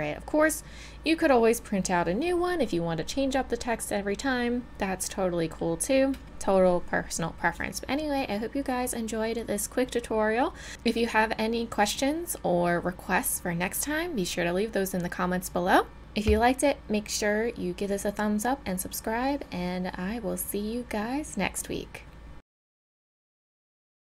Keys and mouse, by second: 5.4-22.3 middle drag.